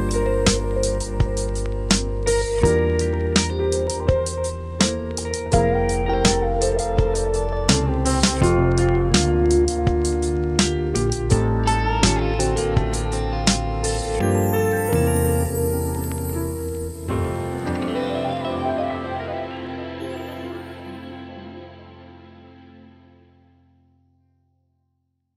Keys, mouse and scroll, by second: 1.0 scroll down 1, 1.2 scroll up 1, 1.3-3.2 right drag, 3.2-3.9 scroll up 1, 3.9-4.5 scroll down 1, 4.5 right click, 5.0-5.3 scroll up 1, 5.3 right click, 5.7 scroll down 1, 5.9 scroll up 1, 6.0-9.6 right drag, 9.6 click, 9.8-11.8 right drag.